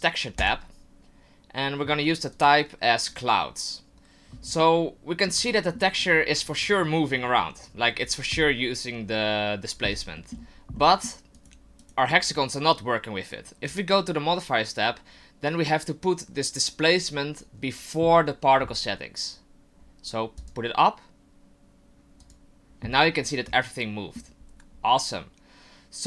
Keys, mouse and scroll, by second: 0.4 click, 2.3 click, 4.6 middle click, 5.5 shift+middle click, 10.2 middle click, 10.7 middle click, 11.3 right click, 13.6 click, 20.4 click, 22.2 click, 23.2 middle click, 24.7 scroll up 1.